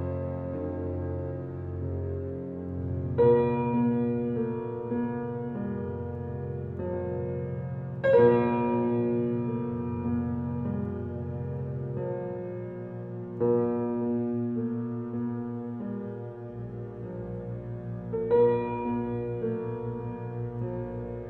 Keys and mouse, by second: 1.1 click, 3.5 click, 4.8 5, 5.1 0, 5.4 Return, 6.3 click, 6.9-7.6 typing, 7.9 Return, 9.2-12.4 drag, 13.0 ctrl+z, 13.8-21.2 ctrl+drag.